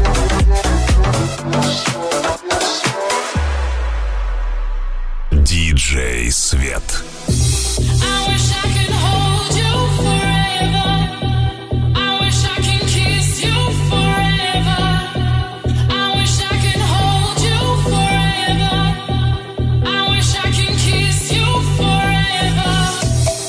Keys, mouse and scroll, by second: 7.2 w, 12.8 g, 16.7 s, 18.7 g, 19.3 s, 22.9 g.